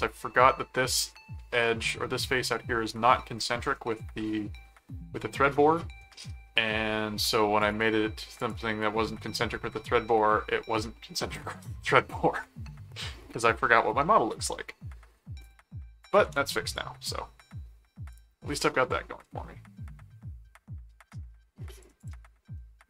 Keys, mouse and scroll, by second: 2.3 middle click, 3.7 middle click, 5.1 middle click, 7.6 click, 8.4 click, 15.4 click, 16.0 shift+click, 16.5 shift+c, 16.7 click, 17.1 middle click, 18.1-21.8 drag, 22.0 click, 22.5 middle click.